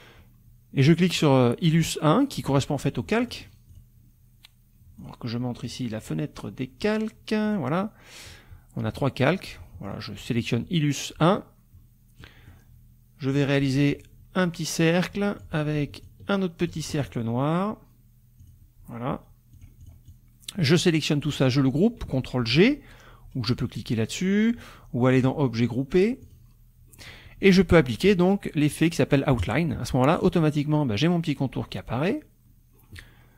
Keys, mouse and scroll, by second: 1.1 click, 3.2 click, 3.7 click, 5.0 click, 5.7 click, 7.5 click, 9.4 click, 9.9 click, 10.4 click, 12.2 click, 13.3 click, 13.9-15.6 ctrl+drag, 16.0 ctrl+click, 18.4 click, 19.5 click, 20.6 click, 25.2 click, 26.2 click, 29.4 click.